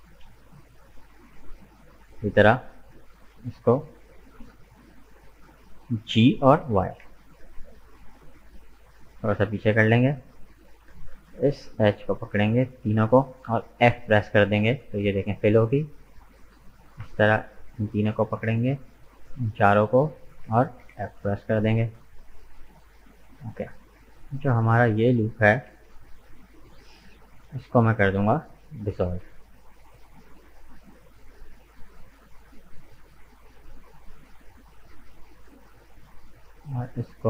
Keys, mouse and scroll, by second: 0.0-0.5 scroll up 2, 0.9-2.1 middle drag, 2.1 right click, 2.6-5.8 middle drag, 6.1 g, 9.5-10.6 middle drag, 10.6 right click, 11.4 shift+right click, 12.2 shift+right click, 12.8-13.9 middle drag, 13.9 f, 14.7 middle click, 15.5 right click, 16.5 right click, 17.4 shift+right click, 18.3 shift+right click, 19.0 shift+right click, 19.4-20.8 middle drag, 20.8 f, 21.5 right click, 22.0-24.5 middle drag, 24.5 alt+right click, 25.9 alt+shift+right click, 26.4-30.0 middle drag, 30.0 Delete, 31.3-34.4 middle drag, 34.4 right click, 35.0-37.2 middle drag.